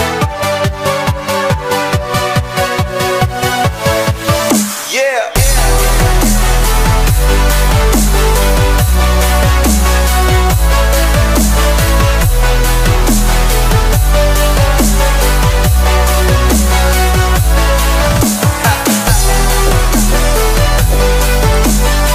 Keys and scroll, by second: 10.8 ctrl+shift+i, 12.3 ctrl+u.